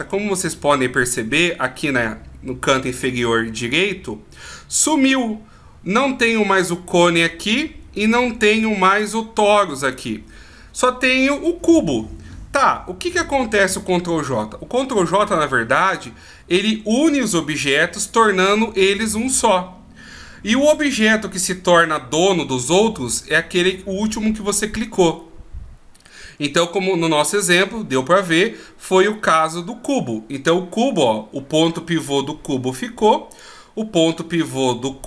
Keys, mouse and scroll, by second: 3.6 click, 33.3 right click.